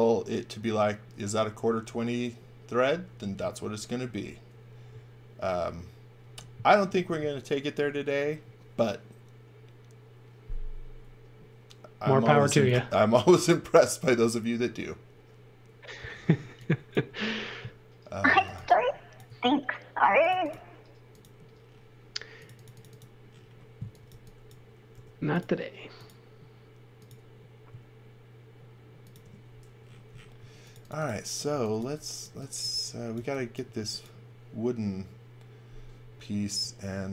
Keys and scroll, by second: 12.4 x, 12.7 v, 16.4 x, 17.0 space, 18.3 x, 18.6 v, 19.3 space, 23.8 x, 24.1 v, 24.9 m, 30.4-33.7 typing.